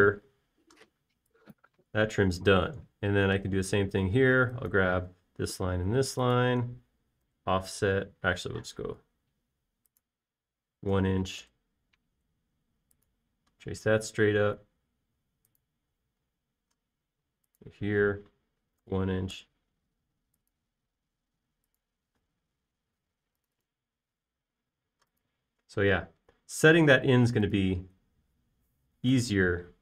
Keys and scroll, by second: 1.4 typing, 3.6 space, 8.7 f, 9.9-10.3 typing, 12.4 1, 12.8 Return, 17.7 space, 17.9 l, 20.2 1, 20.8 Return, 23.5 p, 24.5 Escape, 25.2 e, 27.2-27.6 typing.